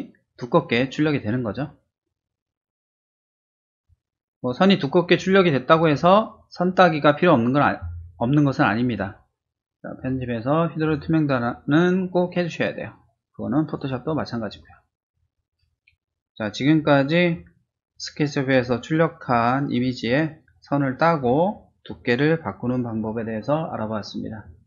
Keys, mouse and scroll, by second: 9.9 click, 10.8 click, 13.6 click.